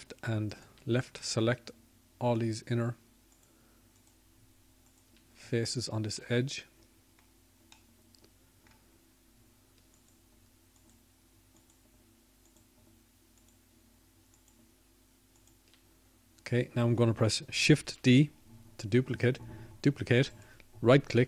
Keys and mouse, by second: 0.5-1.6 drag, 2.5 middle click, 3.4-7.0 middle drag.